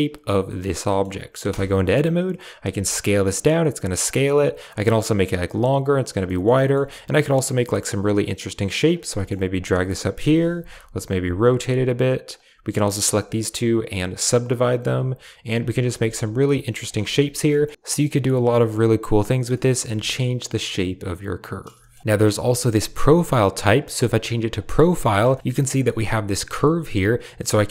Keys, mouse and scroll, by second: 0.5 right click, 0.8 drag, 1.4 Tab, 2.6 s, 4.6 s, 4.8-5.9 drag, 6.1 click, 6.5 shift+click, 7.5 g, 8.8 right click, 8.9 g, 10.2 KP_7, 10.9 r, 11.2 g, 12.2 click, 12.7 shift+click, 13.5-14.0 drag, 14.7 g, 15.4 click, 15.6 r, 15.9 s, 16.4 g, 16.9 Tab, 17.1 click, 17.7 Tab, 18.2 r, 18.5 g, 19.1 click, 19.4 shift+click, 19.8 Tab, 19.9-21.6 drag, 21.7 shift+click, 24.5 click, 25.2 shift+drag, 25.4-27.7 middle drag.